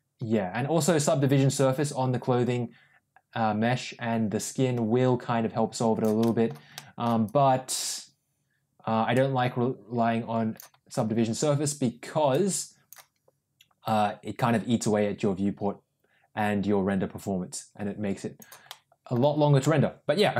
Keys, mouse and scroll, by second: 6.1 middle click, 6.6 middle click, 7.1-10.5 drag, 12.2 click, 13.7-18.3 drag, 18.6 middle click, 19.5-20.3 middle drag.